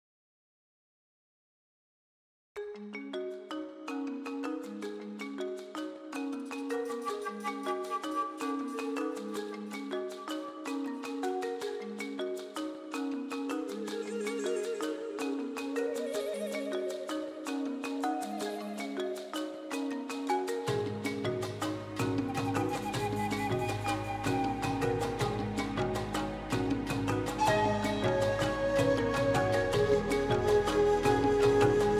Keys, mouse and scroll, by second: 0.2 click, 0.6 alt+z, 0.6-1.7 middle drag, 1.7 g, 2.7 middle click, 3.4 click, 4.3 g, 6.5 Tab, 6.6-7.6 middle drag, 7.6 KP_1, 7.8-8.5 scroll down 1, 8.5-9.1 middle drag, 9.1 KP_1, 9.3 Tab, 9.4 middle click, 9.7 click, 10.0 g, 10.8 Tab, 11.0-11.3 middle drag, 11.3 KP_1, 11.8 ctrl+s, 12.5-13.1 scroll down 1, 13.1 ctrl+s, 14.9 ctrl+s, 15.1-16.1 shift+middle drag, 16.4 KP_Divide, 16.6-17.0 scroll down 2, 17.0 shift+middle click, 17.3 shift+s, 17.7 scroll up 1, 18.0 shift+a, 19.3 scroll down 2, 19.5 s, 20.5 g, 20.9 s, 21.2 right click, 21.7 ctrl+2, 21.8-22.2 scroll up 3, 22.0 shift+middle click, 22.2 Tab, 22.4 shift+middle click, 22.6 1, 22.8 alt+z, 23.0 click, 23.6-24.1 scroll up 4, 23.8 shift+middle click, 24.1 alt+z, 24.4 alt+z, 24.6 click, 25.1-25.6 scroll down 3, 25.2 alt+z, 25.6 shift+middle click, 25.7 scroll up 2, 26.5-27.8 drag, 27.8 g, 30.4 s, 31.6 Tab, 31.7 g.